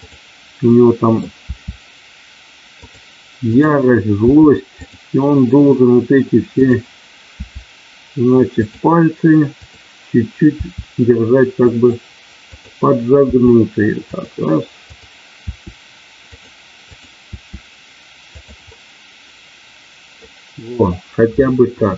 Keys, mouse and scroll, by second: 0.7 middle click, 1.5 r, 2.8 click, 4.2 r, 4.7 click, 6.6 click, 7.3 r, 9.6 click, 10.6 r, 11.6 click, 12.6 click, 13.3 r, 14.1 click, 14.8 click, 16.9 click, 17.2 r, 18.3 click, 18.7-20.3 middle drag, 21.7 KP_1.